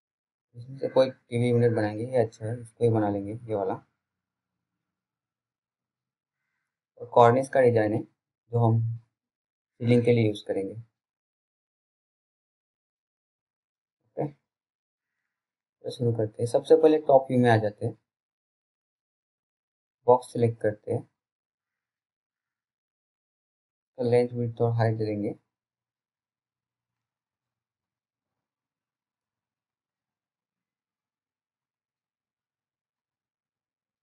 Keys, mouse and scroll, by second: 5.5 click, 10.2 click, 18.7 w, 19.9 click, 20.4-20.9 scroll down 1, 20.9 click, 31.6 click, 33.8 BackSpace.